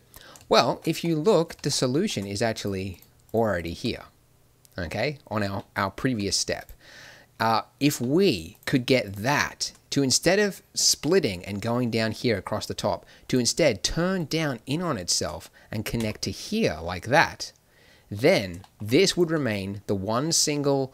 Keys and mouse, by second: 1.7 middle click, 2.5-5.5 drag, 8.0-15.9 drag, 15.9 f.